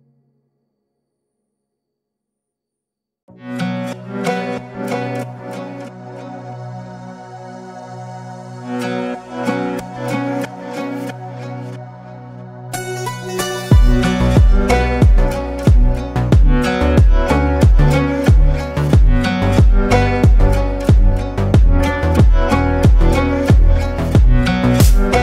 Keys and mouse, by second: 2.7-4.3 drag, 6.5-7.3 drag, 12.1 click, 12.1 right click, 13.6-14.5 drag, 14.7-15.2 drag, 15.8 click, 16.3-19.5 drag.